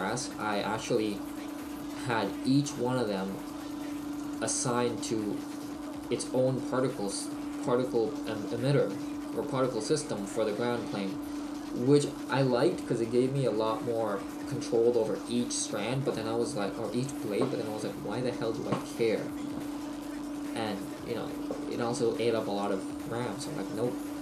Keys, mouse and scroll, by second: 4.2 click, 4.2-5.2 scroll up 7.